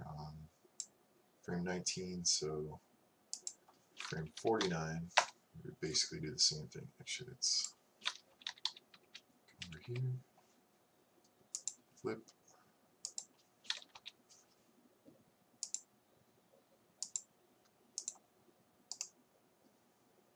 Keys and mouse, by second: 4.4 Right, 4.7 Right, 7.5 click, 8.2 click, 8.4-8.8 Left, 8.5 click, 8.8 click, 9.2 Left, 9.9 Right, 12.7 click, 14.0 Left.